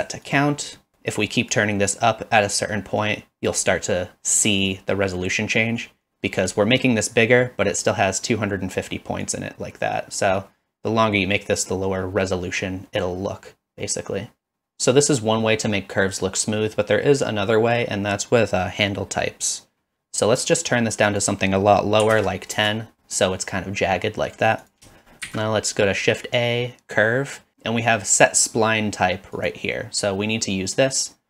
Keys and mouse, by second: 1.6-3.5 drag, 5.8 click, 9.3-14.5 drag, 21.1-23.0 drag, 25.3 shift+a.